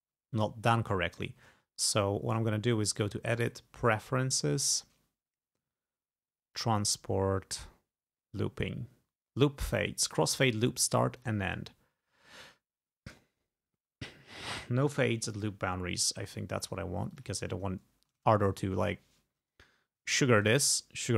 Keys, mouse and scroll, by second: 0.7-1.2 ctrl+scroll down 4, 2.9 click, 3.9 click, 6.0 scroll up 2, 6.6 click, 11.2 click, 15.4 click, 17.2 click, 17.8 ctrl+scroll down 2, 19.6 ctrl+scroll down 2.